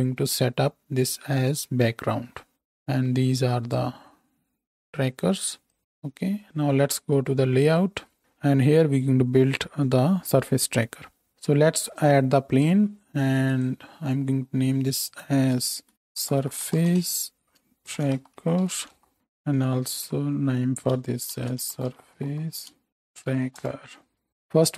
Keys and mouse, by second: 2.5-4.1 middle drag, 4.1-5.8 drag, 5.8-13.6 middle drag, 11.3 shift+x, 11.7 shift+a, 13.6-24.3 drag, 20.1 F2, 24.3-24.7 middle drag.